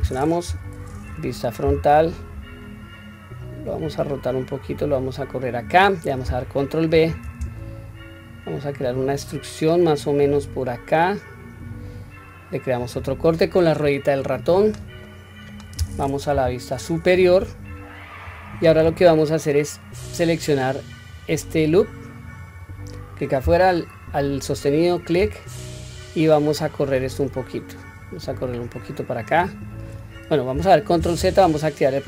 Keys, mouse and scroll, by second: 0.5 KP_1, 1.6 r, 4.6 click, 6.9 ctrl+b, 14.2-14.8 middle drag, 15.0 middle click, 16.3 KP_7, 17.0 scroll down 1, 17.6-18.1 scroll down 1, 22.4 click, 24.5 alt+click, 26.0 click, 31.0 ctrl+z.